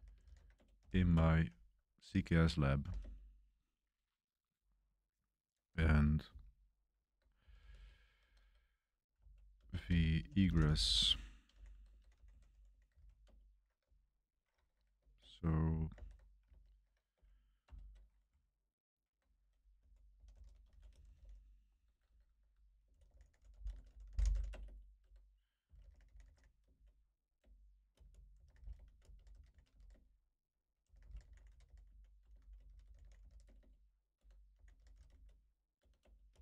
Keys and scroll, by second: 0.0-1.6 typing, 3.0 typing, 7.1-13.5 typing, 15.9 super+3, 16.4 super+1, 16.6 super+1, 16.7 super+3, 17.6 ctrl+alt+shift+3, 19.5-35.7 typing, 27.3 Return, 35.9 Return.